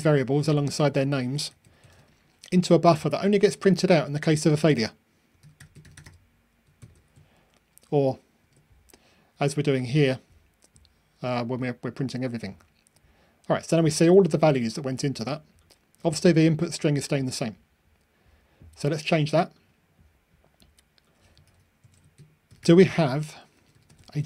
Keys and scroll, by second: 1.4 super+c, 1.9 super+v, 6.8 super+F9, 8.3 ctrl+r.